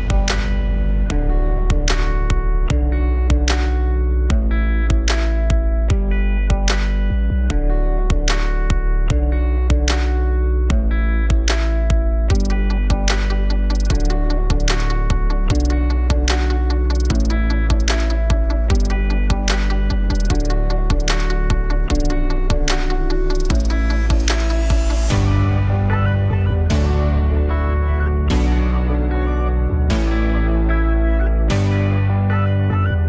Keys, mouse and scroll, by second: 7.3 KP_1, 9.0-9.3 scroll up 2, 9.3-10.0 alt+middle drag, 10.0-10.4 scroll up 1, 10.4-11.3 alt+middle drag, 11.3 click, 11.6 shift+a, 15.6-16.1 alt+middle drag, 16.1-16.7 scroll up 3, 16.7 alt+middle click, 17.2-18.0 scroll up 2, 18.0 scroll up 1, 18.3 g, 23.0 click, 23.2-25.7 drag, 25.7-26.1 scroll down 6, 26.1-26.8 alt+drag, 26.8-27.1 scroll down 4, 27.1-27.7 alt+middle drag, 27.7-28.2 scroll up 5, 28.2-31.6 alt+middle drag, 31.6 click.